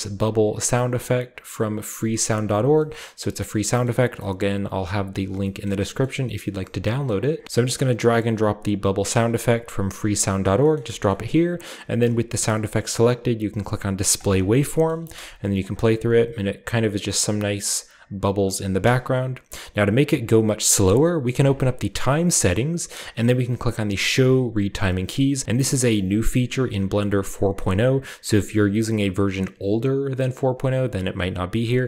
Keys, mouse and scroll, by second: 3.1 ctrl+middle click, 3.1-4.0 ctrl+scroll up 3, 3.4 ctrl+middle click, 3.9 ctrl+middle click, 4.2-5.5 middle drag, 5.7 ctrl+middle click, 6.1 middle click, 7.1-7.6 scroll down 2, 7.8-10.6 drag, 11.1-12.5 middle drag, 12.0 g, 12.5 click, 14.2 click, 14.9-16.6 middle drag, 14.9-16.6 scroll up 1, 15.0-15.5 typing, 18.8 space, 21.4 click, 22.3-23.5 scroll down 1, 23.5-24.1 scroll down 1, 24.2 click, 25.6 click, 26.1 click.